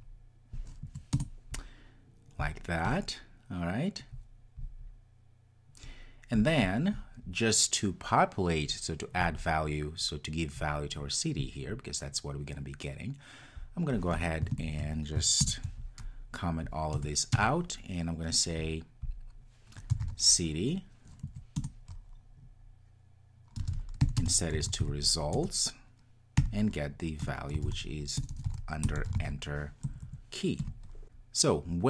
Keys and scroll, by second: 1.1 Return, 15.4 super+/, 21.6 Return.